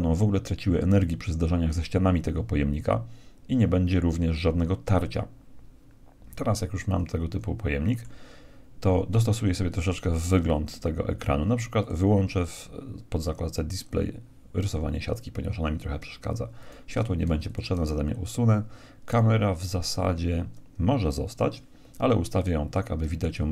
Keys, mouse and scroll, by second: 6.5-8.5 middle drag, 11.8-13.5 drag, 13.9-15.6 drag, 16.5-18.5 right drag, 17.2 x, 19.0-20.9 right drag, 22.9 KP_1.